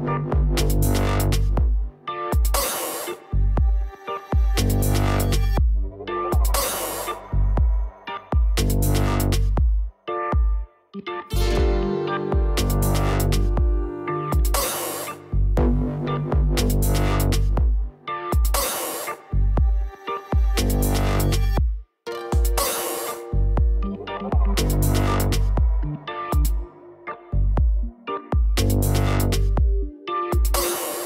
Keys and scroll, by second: 13.4-15.1 typing, 17.5-19.3 typing.